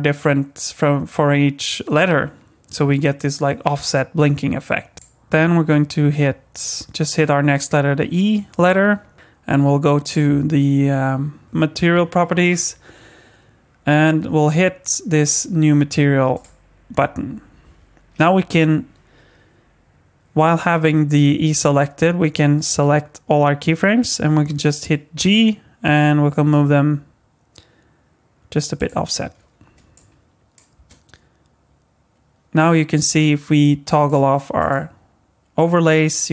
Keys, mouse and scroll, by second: 4.9 click, 10.0 click, 16.3 click, 22.7 a, 25.2 g, 29.9 click, 30.7 space, 34.0 click, 34.6 click.